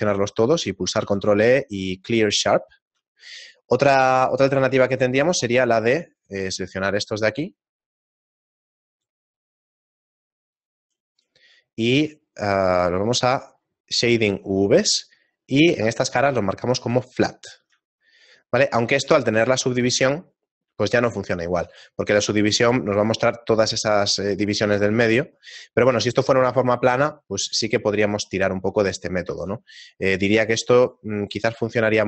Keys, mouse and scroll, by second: 1.0 ctrl+e, 2.7 shift+middle click, 3.4-4.3 scroll up 2, 4.3-4.8 scroll up 1, 4.8 ctrl+Tab, 5.4 right click, 6.0 shift+right click, 6.2 shift+right click, 6.9 right click, 8.2 right click, 9.3 shift+middle click, 10.2 shift+right click, 10.5 shift+right click, 11.6 shift+middle click, 14.0 click, 17.0 click, 18.0 shift+middle click, 19.9 Tab, 20.9 shift+middle click, 25.0 shift+middle click, 26.8 middle click, 27.7 shift+middle click, 29.0 Tab, 29.9 ctrl+Tab, 30.2 right click, 30.8 shift+right click, 31.2 right click.